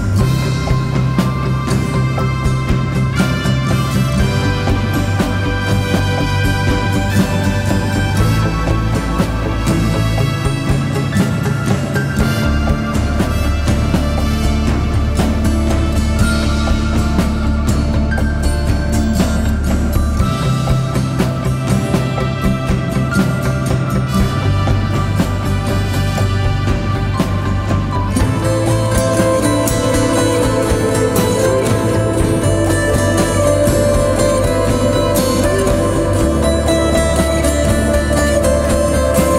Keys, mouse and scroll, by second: 7.5 ctrl+t, 11.9 alt+shift+click, 16.8 Return, 18.1 Right, 19.1 Right, 19.3 Right, 19.9 Right, 20.1 Right, 20.3 Right, 20.5 Right, 20.9 Right, 22.6 Right, 31.3 ctrl+t, 32.8 alt+shift+click, 35.7 alt+shift+click.